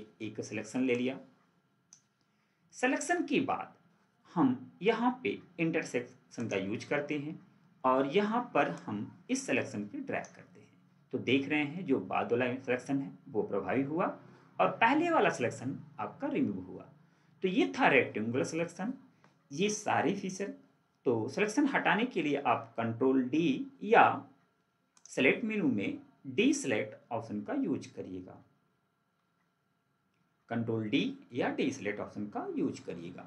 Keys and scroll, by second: 32.6 ctrl+4.